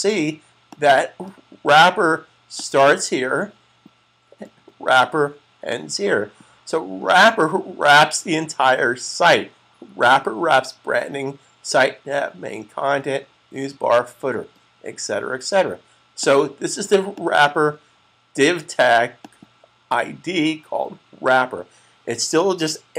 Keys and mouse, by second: 5.8 click, 16.0 click.